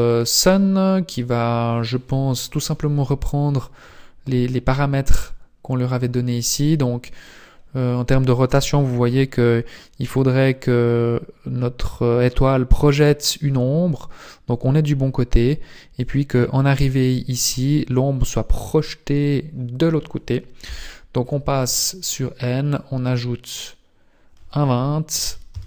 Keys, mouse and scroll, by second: 0.0 right click, 0.4 middle click, 2.0 KP_7, 2.6-3.3 scroll up 7, 5.6 scroll up 1, 5.9 click, 10.2 click, 16.0 click, 20.6 n, 22.7 click, 25.5 click.